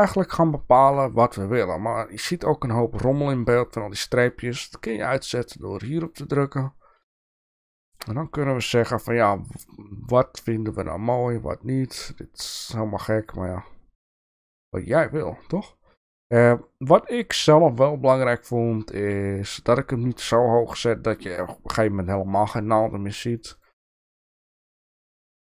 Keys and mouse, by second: 5.9 click, 7.2 shift+middle click, 8.9-20.3 drag, 23.3 click, 23.5 click, 24.4 click, 24.7 click.